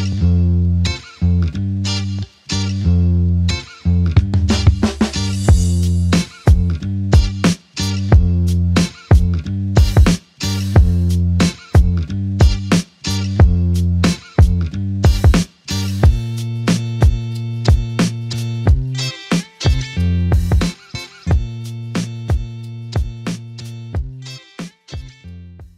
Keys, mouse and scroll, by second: 3.3 alt+f, 4.1 double click, 7.7 2, 8.1 Return, 10.7 ctrl+alt+click, 11.7 alt+click, 19.3 shift+click, 21.1 f, 22.0 shift+click, 24.7 alt+click.